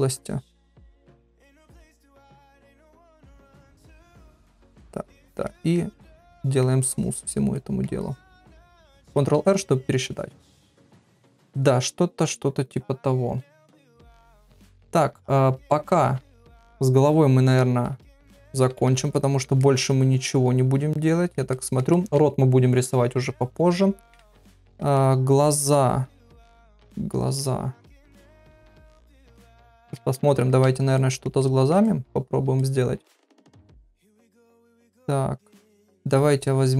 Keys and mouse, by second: 0.2 click, 0.6 click, 0.8 middle click, 1.4 click, 1.6 click, 1.9 middle click, 2.5 middle click, 3.1 click, 3.5 click, 3.9 middle click, 4.5 click, 4.8 shift+click, 5.5 middle click, 6.0 shift+click, 6.3 middle click, 6.9 shift+click, 7.6 middle click, 8.0 shift+click, 9.1 ctrl+r, 10.0 middle click, 11.2 ctrl+middle click, 11.5-13.9 middle drag, 14.1 ctrl+middle click, 14.4 middle click, 16.4 ctrl+middle click, 17.6-18.9 middle drag, 19.2 ctrl+middle click, 19.6-21.3 middle drag, 21.5 ctrl+middle click, 21.9 middle click, 23.6 middle click, 24.3 ctrl+middle click, 24.9-26.6 middle drag, 27.1 shift+click, 28.4-29.5 middle drag, 29.6 shift+middle click, 30.1 ctrl+middle click, 31.0 middle click, 31.4 shift+middle click, 31.8 middle click, 32.6-33.7 middle drag, 33.9 ctrl+middle click, 34.3-35.9 middle drag.